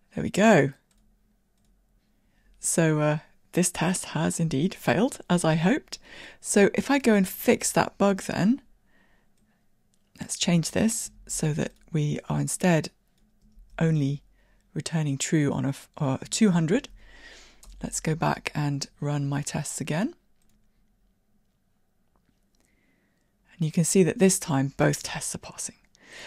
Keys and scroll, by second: 12.1 super+c, 13.6 super+v, 16.9 super+e.